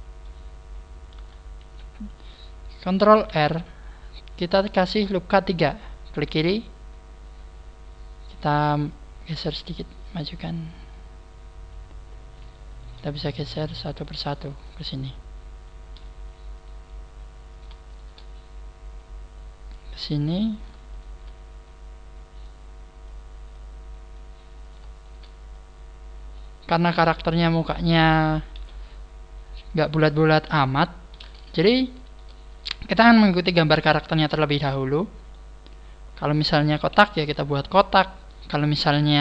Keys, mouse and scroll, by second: 0.2 shift+middle click, 1.4 scroll down 3, 1.6 KP_7, 3.2 ctrl+r, 3.7 KP_7, 6.2 click, 8.8 click, 11.6 click, 12.3 right click, 12.6 shift+right click, 13.2 click, 14.2 click, 15.1 click, 16.5 right click, 17.4 right click, 17.8 shift+right click, 18.9 click, 20.4 right click, 20.8 shift+right click, 22.4 click, 24.6 click, 24.6 right click, 24.9 shift+right click, 25.6 click, 26.6 scroll down 4, 27.0 middle click, 28.5 KP_1, 30.4 KP_3, 31.6 shift+middle click, 34.4-34.8 scroll up 1, 35.3 middle click, 35.3 scroll up 1, 36.1 middle click, 37.0 KP_1.